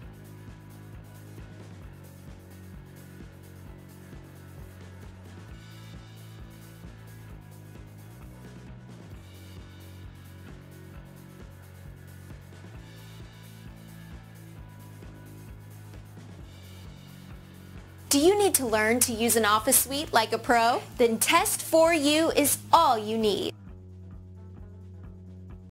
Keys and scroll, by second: 7.5 Return.